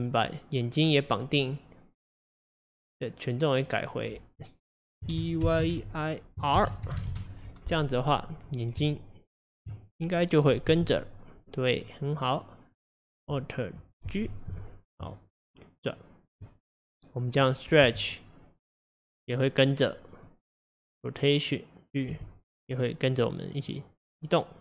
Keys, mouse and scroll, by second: 0.0 click, 3.0 click, 3.7 click, 3.8-6.8 drag, 8.1 click, 8.8 Tab, 10.2 click, 10.7 g, 12.5 click, 14.1 alt+g, 14.9-17.3 middle drag, 17.3 click, 17.9 g, 20.1 click, 22.2 g.